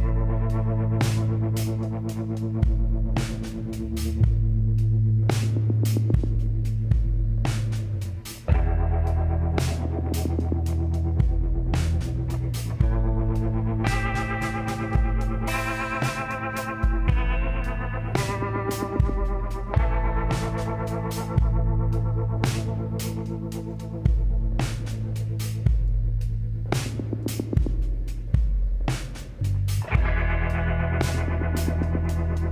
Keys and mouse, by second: 8.0 shift+d, 9.8-11.7 drag, 11.7 r, 18.0 s, 24.6 t, 27.4 s.